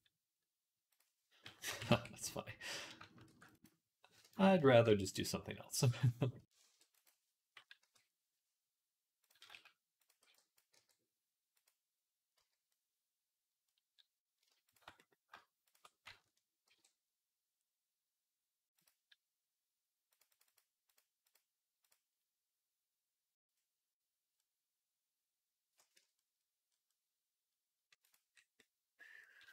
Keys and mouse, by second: 1.5 KP_3, 1.7 Tab, 3.1 ctrl+r, 4.7 ctrl+r, 5.0 right click, 5.1 middle click, 6.7 ctrl+r, 7.6 KP_3, 9.0 click, 9.3 z, 10.0 b, 10.6 g, 11.4-12.5 drag, 12.2 z, 12.5-13.5 middle drag, 13.5-14.6 drag, 14.8 click, 16.5 ctrl+b, 19.9-25.1 drag, 25.8 Tab, 26.0-27.9 drag, 27.9-29.5 middle drag.